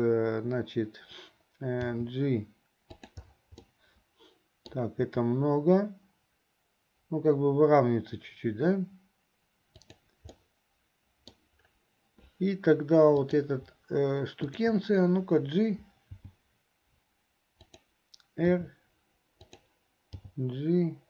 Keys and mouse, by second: 3.8-5.0 middle drag, 10.5 click, 10.5 right click, 13.3 click, 14.5 shift+click, 20.4 g.